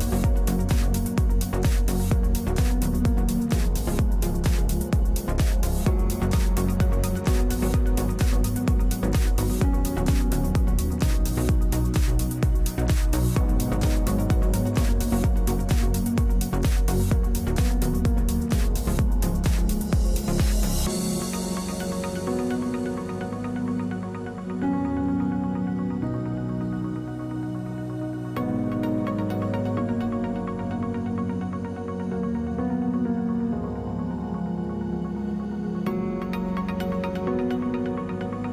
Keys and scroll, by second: 1.0 w, 5.1 space, 6.6 space, 9.9 3, 14.1 3, 27.0 3.